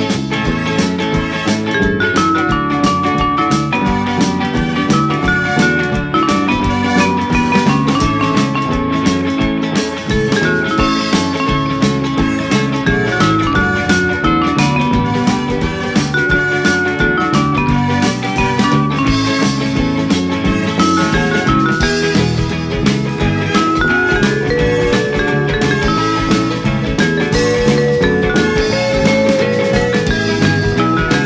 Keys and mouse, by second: 0.5 click, 0.9 middle click, 1.8 a, 2.2 e, 3.6 z, 6.5 click, 7.1 Tab, 7.5 middle click, 9.4 click, 12.0 click, 13.7 right click, 14.0 click, 15.2 click, 18.6 click, 19.7 click, 19.9 Tab, 21.3 g, 21.7 z, 22.8 click, 23.1 Tab, 23.2 F6, 23.6 click, 24.0 Tab, 24.3 middle click, 25.9 click, 27.0 click, 27.4 click.